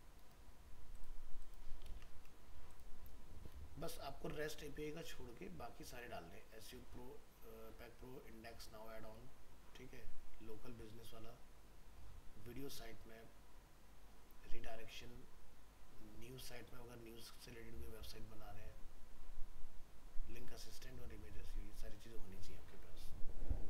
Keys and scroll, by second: 1.9 ctrl+v.